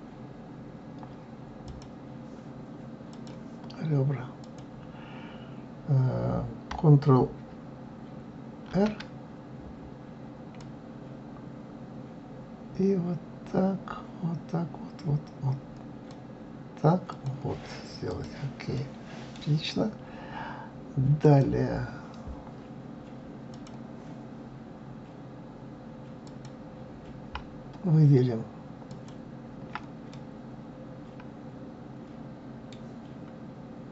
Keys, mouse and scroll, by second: 1.7 click, 3.1 click, 4.4 click, 8.6 ctrl+r, 18.0 click, 18.7-20.0 middle drag, 20.0-21.2 scroll up 1, 21.2 click, 23.5 click, 26.2 click, 28.8 alt+click, 30.1-33.1 middle drag.